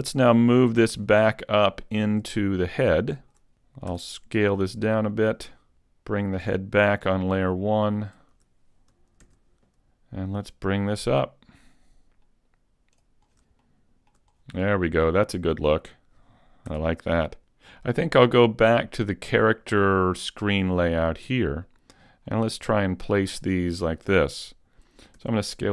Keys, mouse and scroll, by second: 0.9 click, 1.4-1.9 scroll down 1, 1.9 shift+middle click, 2.3-2.9 scroll down 1, 2.9 shift+middle click, 2.9-3.5 scroll down 3, 3.5 scroll up 5, 3.9 s, 5.2 click, 6.2 shift+click, 8.0 shift+click, 9.3 shift+c, 10.8 click, 13.3-14.2 scroll up 3, 13.7 shift+middle click, 14.3-16.5 scroll up 2, 14.8 shift+middle click, 16.7 s, 19.1 click, 22.0-22.8 scroll down 6, 22.9 shift+middle click, 25.2 s.